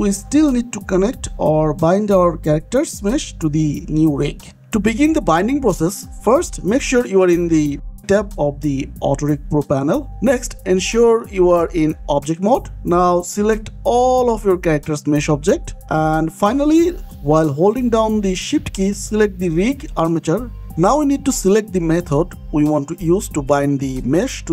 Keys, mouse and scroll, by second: 5.4 click, 7.8 middle click, 8.9 click, 11.8 click, 13.7 click, 14.0-14.4 scroll down 1, 14.6 shift+click, 15.1 scroll up 1, 15.6 shift+click, 16.9 scroll down 1, 19.8 shift+click.